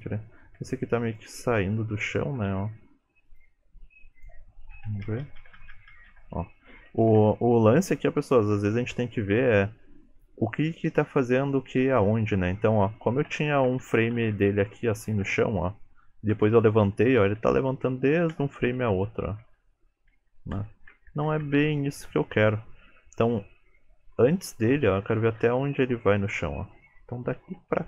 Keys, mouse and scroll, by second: 0.6 r, 1.4 g, 2.4 r, 3.5 g, 4.9 Left, 5.1-5.6 Left, 5.8 Left, 6.0 Left, 6.2 Left, 7.1 Right, 7.3 Right, 13.6-14.4 Left, 14.6 Left, 15.0 Left, 15.3 Right, 16.4 Right, 16.6 Right, 17.8 Right, 18.0 Right, 18.2 Right, 18.4 Right, 18.6-20.0 Left, 20.2 Left, 20.4 Left, 20.6 Right, 20.8 Right, 21.0 Right, 21.2 Right, 21.3 Right, 21.5 Right, 21.7 Right, 25.3 Right, 25.7 Right, 26.2 Right, 27.3 Left, 27.6 Right.